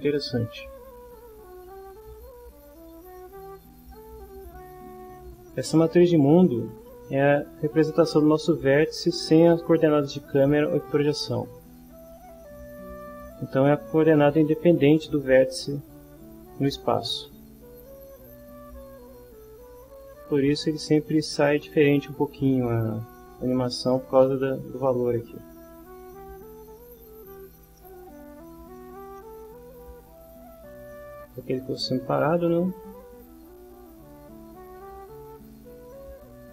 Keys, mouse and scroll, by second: 10.9 middle click, 11.6 middle click, 18.4-20.1 drag, 27.8 middle click, 28.2 middle click, 29.2 middle click, 30.2 click, 31.4-34.1 drag, 35.0-36.4 drag.